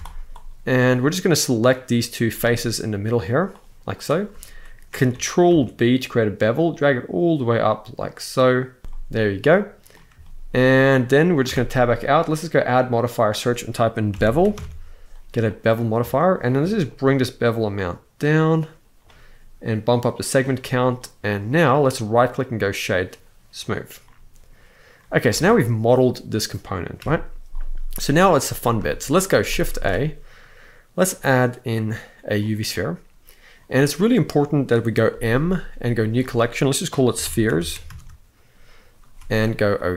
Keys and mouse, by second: 0.0 alt+shift+click, 0.6 middle click, 2.0-3.0 middle drag, 3.4 click, 5.2 ctrl+b, 8.8 middle click, 8.8 z, 10.0 shift+middle click, 11.2 Tab, 12.4-15.3 drag, 15.7 shift+middle click, 16.6-18.8 shift+drag, 19.7 click, 19.9 click, 20.3-20.7 middle drag, 21.7-23.4 right drag, 23.7-24.6 middle drag, 25.1 alt+a, 26.7 KP_1, 28.0 z, 28.6 shift+middle drag, 29.4 shift+a, 34.8 m.